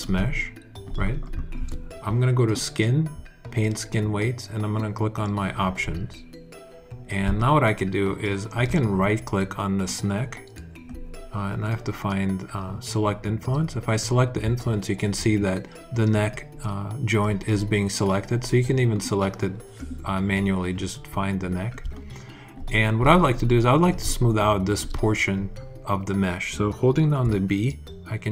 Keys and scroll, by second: 27.1 b.